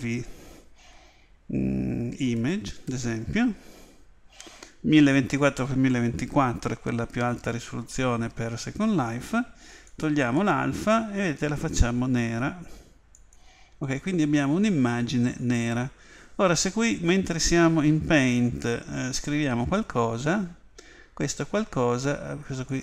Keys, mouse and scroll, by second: 14.1-16.8 middle drag, 19.7 click, 22.7 click.